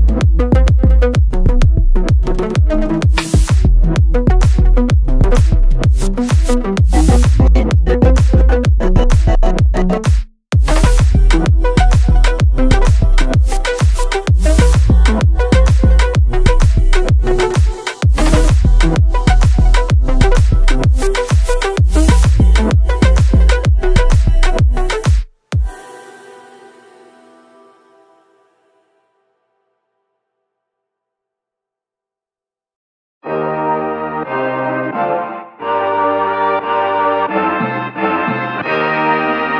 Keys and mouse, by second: 1.4 shift+a, 6.5-7.5 drag, 8.1 ctrl+middle click, 8.8 middle click, 9.1 ctrl+middle click, 9.8-11.2 drag, 11.6-12.7 drag, 13.1-14.8 drag, 15.0-17.2 middle drag, 17.8 click, 19.0-20.0 drag, 20.3 click, 21.0-21.6 drag, 22.6-23.5 drag, 24.8-25.5 drag, 26.3-27.1 drag, 27.4-29.9 drag, 31.0 click, 32.9 click, 34.3 ctrl+middle click, 34.7 middle click, 35.8 middle click, 36.2 click, 36.2 click, 36.8 click, 37.8 click, 38.4 click, 38.6 shift+d.